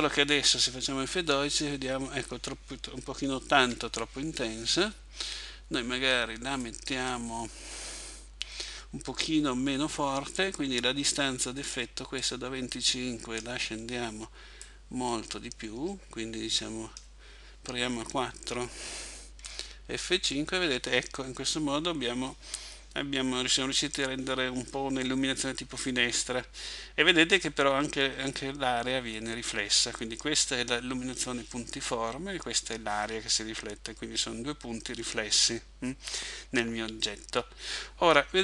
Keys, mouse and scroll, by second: 3.6 Escape, 6.6 click, 12.2 click, 14.6 click.